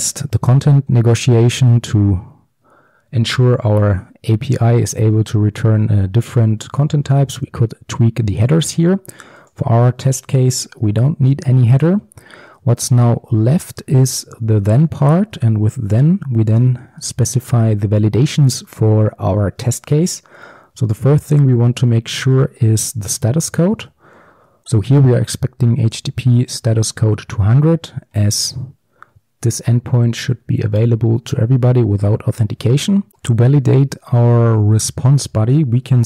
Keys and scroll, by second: 10.8 ctrl+x, 16.1 Return, 17.7 Tab, 23.9 Return.